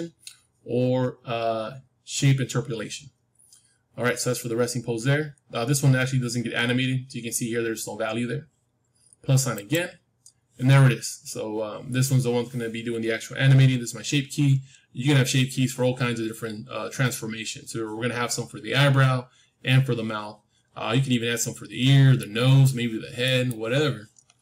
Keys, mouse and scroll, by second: 6.3-8.4 middle drag, 9.5-11.5 drag, 22.1-24.4 middle drag.